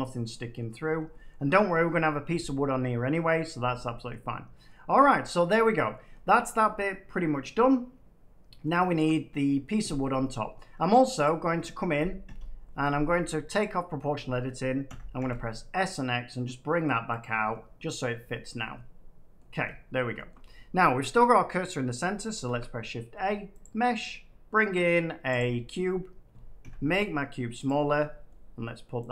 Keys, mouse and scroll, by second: 0.8 Tab, 0.8 scroll down 2, 2.4 scroll down 5, 2.5 scroll, 3.3 middle click, 4.6 middle click, 5.8 scroll down 1, 6.1 middle click, 8.6 middle click, 8.8-9.4 scroll up 9, 9.4 scroll, 9.9 shift+middle click, 10.2 middle click, 10.5 Tab, 11.2 click, 11.7 click, 12.2 l, 13.5 click, 14.8 s, 15.1 x, 17.1 click, 18.0 middle click, 18.3-18.9 scroll down 4, 18.9 scroll, 19.3 middle click, 19.5 Tab, 20.2 shift+middle click, 22.0 shift+middle click, 22.4 a, 23.5 click, 25.3 click, 26.5 s, 27.6 click, 28.2 middle click, 29.0 middle click.